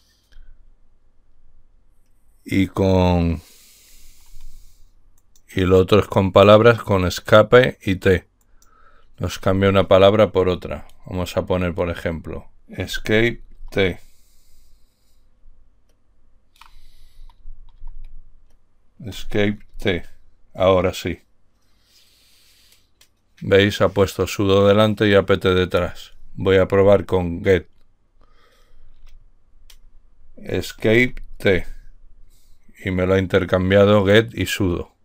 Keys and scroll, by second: 13.3 Escape, 14.0 t, 17.7 Right, 17.8 Right, 17.9 Right, 18.2 Right, 18.4 Right, 19.5 Escape, 19.8 t, 27.2 °, 31.2 Escape, 31.8 t.